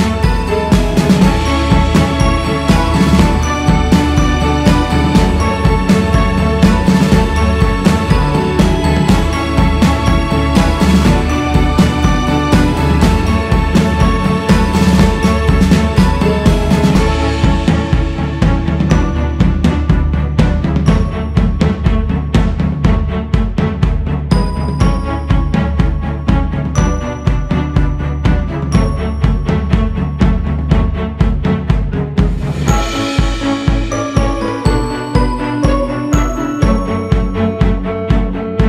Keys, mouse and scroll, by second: 0.2 ctrl+z, 1.3 shift+c, 1.9-2.9 scroll up 3, 2.9 f, 4.4-8.4 drag, 8.4-8.9 scroll down 2, 9.5 click, 12.1 click, 12.7 scroll up 2, 14.1-16.0 drag, 16.0 scroll up 2, 16.9 g, 17.7-28.6 drag, 28.6-29.2 scroll down 3, 29.2 alt+shift+z, 30.0 alt+shift+z, 30.5-31.3 scroll up 3, 31.3-38.6 drag.